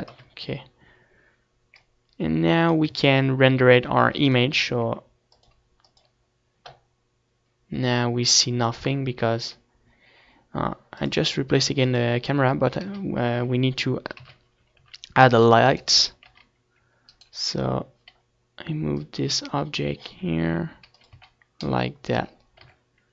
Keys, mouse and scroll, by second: 1.0 ctrl+s, 2.0 a, 2.2 ctrl+s, 3.4-5.2 drag, 9.1-10.8 drag, 11.0 KP_1, 11.5 z, 12.3 KP_3, 12.8-13.9 middle drag, 12.9 c, 13.9-16.2 drag, 14.4 r, 16.2-17.5 right drag, 17.1-18.7 drag, 18.5 r, 19.1-21.7 drag, 19.2 z, 20.7 r, 21.8-23.1 drag.